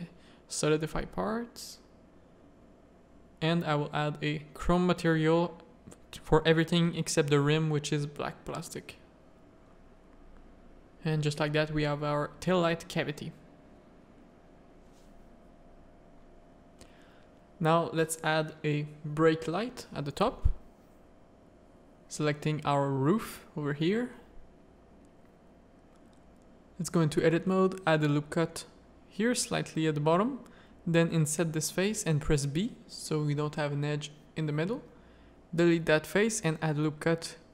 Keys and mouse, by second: 0.5 click, 2.2 ctrl+i, 4.4 Tab, 5.0 alt+a, 6.3 middle click, 6.4 z, 7.1 middle click, 10.4 middle click, 11.1-12.2 middle drag, 12.5-13.9 middle drag, 14.3 shift+middle click, 15.3 z, 15.7 shift+middle click, 16.2 z, 16.8 middle click, 17.7 middle click, 19.3-20.4 middle drag, 21.3-24.5 middle drag, 24.7 Tab, 24.8 middle click, 25.5 shift+middle click, 25.7 middle click, 26.1 click, 26.5 ctrl+r, 28.0 middle click, 28.4 3, 28.5 click, 29.0 middle click, 30.1 i, 33.1 x, 34.7 1, 35.4 ctrl+r.